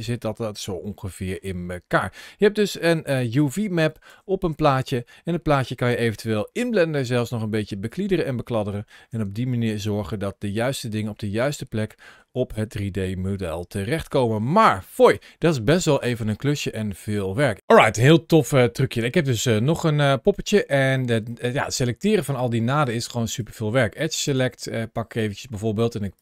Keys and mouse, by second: 0.0 shift+click, 0.4 middle click, 0.9 shift+click, 2.8 Tab, 3.9 Tab, 6.0-8.5 shift+drag, 9.0 Tab, 10.1-12.1 drag, 12.2 Tab, 13.4-13.8 shift+middle drag, 14.2 middle click, 14.7-15.0 shift+middle drag, 15.7 shift+middle click, 18.8 shift+middle click, 19.4 middle click, 20.4 shift+middle click, 22.6 2, 22.7 click, 23.5 2, 24.1 click, 26.0 click.